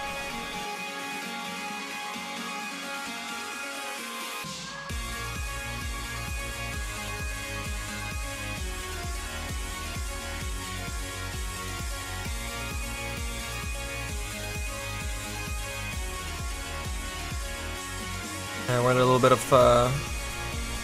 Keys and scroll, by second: 5.2 s, 8.1 z, 8.5 s.